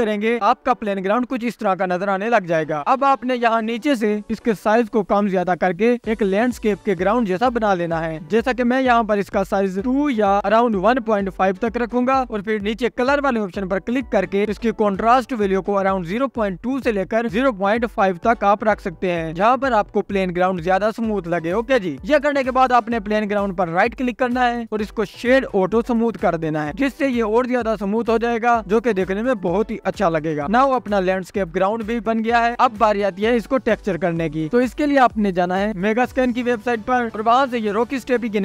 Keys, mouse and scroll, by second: 0.2-1.1 scroll up 1, 1.1-4.1 drag, 4.9-8.2 drag, 12.9-13.3 scroll down 3, 13.5-14.1 scroll down 4, 14.1-14.6 scroll down 6, 16.1-19.3 drag, 19.3-20.4 scroll down 2, 20.4-22.4 drag, 22.4-24.1 scroll up 2, 24.1 click, 24.1-25.5 scroll down 1, 25.5-26.4 right drag, 26.4-28.3 scroll up 2, 28.3-29.6 drag, 29.6-30.5 scroll down 1, 30.5-32.7 drag, 30.5-32.7 scroll up 7, 32.7-34.4 scroll down 2.